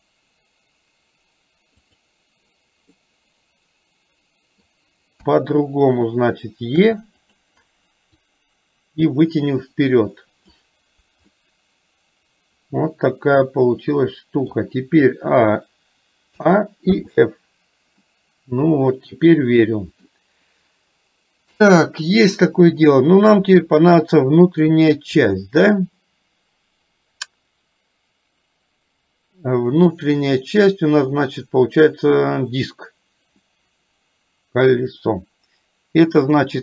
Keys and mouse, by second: 1.9 click, 3.1-4.7 middle drag, 5.2 KP_1, 6.9 e, 8.4-10.6 drag, 11.4-14.6 middle drag, 17.0 f, 18.1-20.1 middle drag, 22.9-24.7 middle drag, 36.4-36.6 drag.